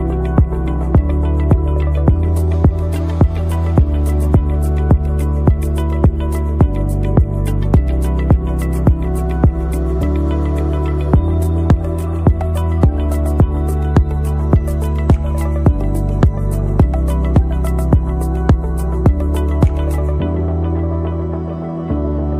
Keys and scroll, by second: 0.1 Right, 1.5 Left, 2.0 Left, 2.3 Left, 2.5 Left, 3.1 Left, 3.4 Left, 3.9 Left, 4.2 Left, 5.2 Left, 5.8 Left, 6.1 Left, 6.3 Left, 6.5 Left, 7.1 Left, 7.7 Left, 8.0 Left, 8.8 Left, 9.0 Left, 9.2 Left, 9.9 Left, 10.1 Left, 10.5 Up, 10.7 Up, 10.9 Up, 11.1 Up, 11.4 Left, 18.1 ctrl+-, 22.0 ctrl+Return.